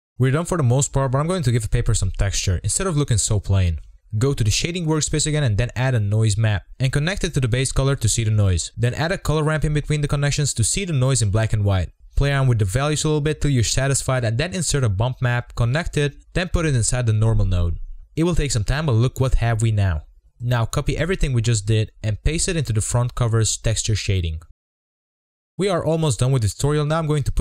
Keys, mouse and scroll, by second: 0.3 KP_Decimal, 0.7 middle drag, 1.0 scroll up 5, 1.4-2.7 middle drag, 2.7-3.4 scroll up 1, 3.4-4.8 scroll up 1, 4.8-6.8 drag, 7.0 shift+middle click, 7.8-9.4 drag, 9.8-11.9 drag, 11.9 scroll down 2, 12.0 scroll up 2, 12.1 scroll down 3, 12.4-13.4 drag, 14.0 scroll up 2, 14.1 middle click, 14.2 scroll down 2, 14.2 shift+middle drag, 14.4 click, 16.8-17.4 drag, 19.4 scroll down 2, 19.7 middle click, 19.8 scroll up 4, 20.0 click, 20.4 scroll down 5, 20.4 middle click, 20.9 click, 21.0 scroll up 3, 21.2 shift+click, 21.5 z, 21.7 KP_0, 21.8-22.4 scroll down 3, 23.0-23.4 scroll down 3, 23.4 scroll up 2, 23.6 z, 23.8 shift+middle click, 24.2 click, 25.2 Delete, 25.3 ctrl+v, 25.7 click, 25.9-26.2 scroll up 4, 26.0 shift+middle click, 26.2-26.5 scroll down 2, 26.3 shift+middle drag, 26.5 z, 26.8 scroll up 1, 26.9 shift+middle click.